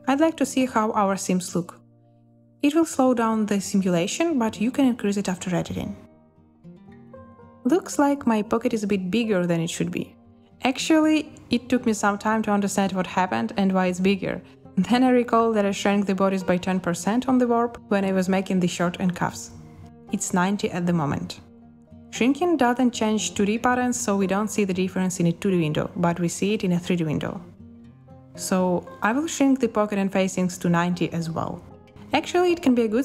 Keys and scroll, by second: 0.4 5, 0.7 Return, 3.1 space, 12.0 space, 31.1-31.9 typing, 32.1 Return.